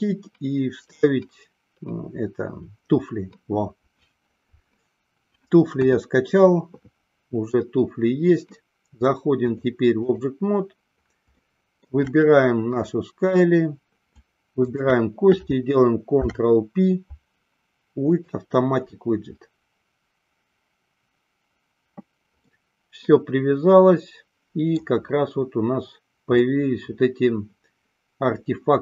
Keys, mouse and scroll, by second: 5.9 KP_1, 9.6 click, 11.5-12.1 shift+middle drag, 14.7 shift+click, 16.3 ctrl+p, 22.6-25.0 middle drag, 26.6-28.8 middle drag.